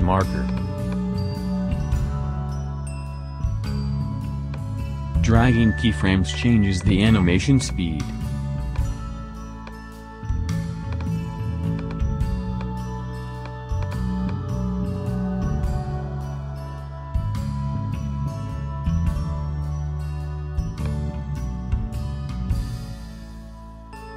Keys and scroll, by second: 11.1 Up.